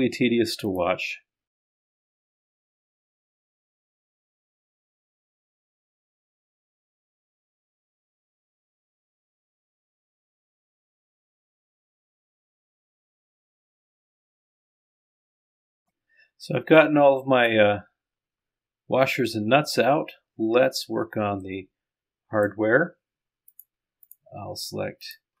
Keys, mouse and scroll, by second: 2.9 click, 3.9 ctrl+click, 4.1 click, 8.3 click, 10.4 scroll up 1, 10.6 click, 11.1 scroll down 1, 11.5-12.1 scroll up 2, 12.1 click, 12.2 scroll down 1, 15.1 click, 15.5-15.9 scroll down 1, 16.2 middle click, 16.9 scroll down 1, 16.9 right click, 18.9 scroll up 2, 20.0 scroll down 2, 20.2-20.9 scroll up 2, 21.4 click, 21.6 middle click, 23.6 right click, 24.1 right click.